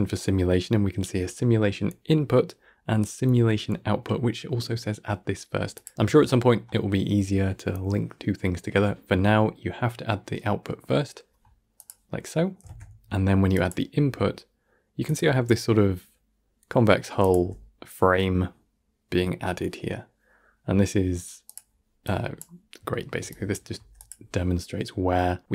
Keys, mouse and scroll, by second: 12.5 shift+a, 17.1-22.6 drag, 22.6 scroll down 1, 22.8-23.2 shift+middle drag, 23.2 click.